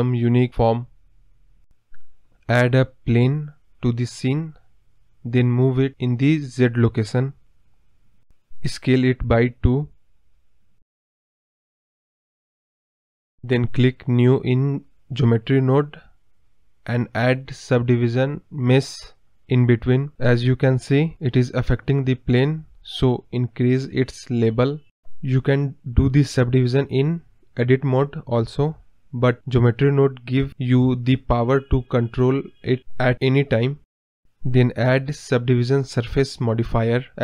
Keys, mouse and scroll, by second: 6.2 click, 7.0-9.6 scroll down 2, 9.6 click, 10.4 scroll down 2, 10.7 middle click, 11.6 KP_1, 12.2 middle click, 15.0-18.6 drag, 19.8 middle click, 20.6-21.9 drag, 21.9 m, 22.6 m, 23.7-26.0 drag, 26.0 scroll up 3, 26.2-28.1 middle drag, 28.1-35.9 drag, 35.9-36.2 scroll down 1, 36.2-36.8 scroll up 1, 36.8-37.2 scroll up 1.